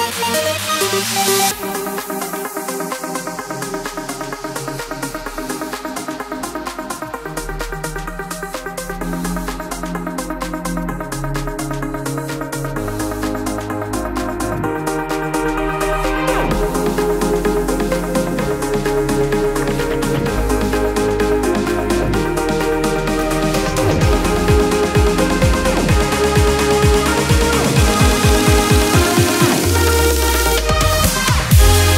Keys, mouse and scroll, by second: 0.0 b, 0.8 alt+right click, 1.8 click, 6.0 alt+click, 7.0 click, 7.3 space, 7.5 click, 7.8 space, 8.3 click, 8.8 alt+scroll up 1, 9.9 space, 10.7-11.3 alt+scroll down 1, 11.7 click, 12.0 space, 12.8 click, 13.9-14.2 alt+scroll up 1, 15.3 t, 17.2 click, 18.9 shift+v, 20.9-23.4 typing, 25.2 click, 28.6 click, 28.9 click, 31.0-31.9 drag.